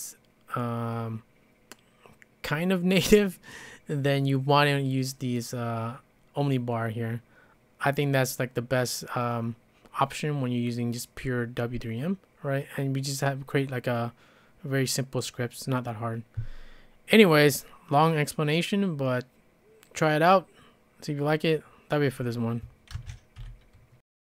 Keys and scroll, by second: 23.0 ctrl+space, 23.4 0.